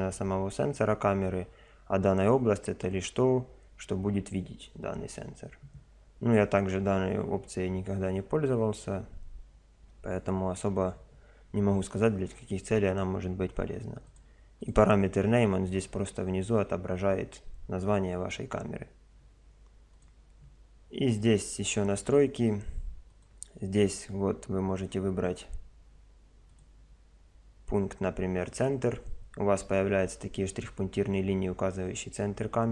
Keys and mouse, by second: 14.0-16.2 drag, 17.4 middle click, 18.2 typing, 20.0 click, 23.1 click, 26.5 click, 29.2-32.7 middle drag.